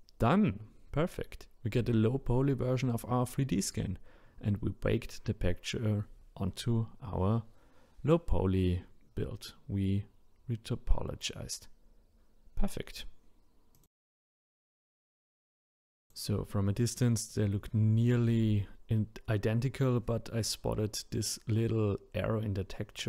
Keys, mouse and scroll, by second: 2.2-2.6 scroll down 1, 2.6 scroll up 1, 3.2 click, 3.9-6.9 middle drag, 11.0-12.0 scroll up 3, 12.0 scroll down 1, 12.6-14.3 middle drag, 14.3-14.8 scroll up 2, 14.8-15.3 middle drag, 15.3-16.8 scroll up 1, 16.8-17.9 drag, 17.9-18.9 scroll down 4, 18.9-23.0 scroll down 7.